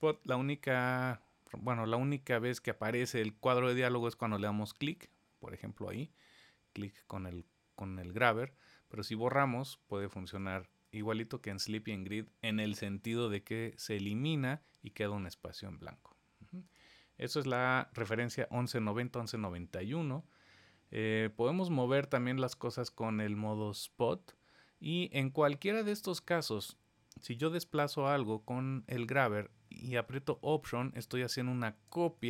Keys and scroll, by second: 0.0 super+z.